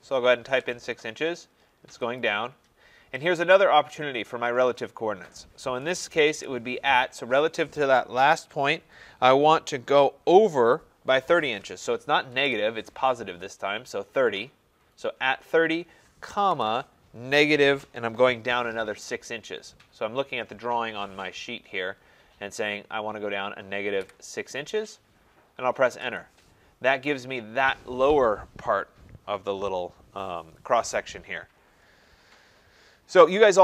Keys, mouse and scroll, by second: 0.4-3.2 Return, 2.2 click, 3.0 scroll, 3.1 scroll up 3, 3.2-5.4 scroll, 6.3 @, 12.3 typing, 16.2-17.9 typing, 24.0 typing, 26.0 Return.